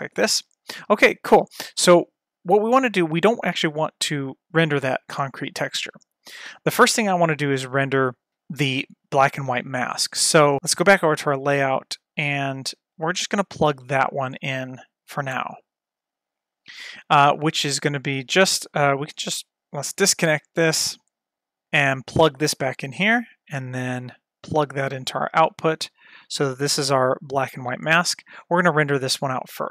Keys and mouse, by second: 11.0 click, 13.0-13.9 drag, 15.4 middle drag, 16.4 middle click, 17.6 middle click, 19.8-20.5 drag, 20.8-21.3 drag, 21.6 click, 23.8 ctrl+shift+click, 26.9-28.0 drag.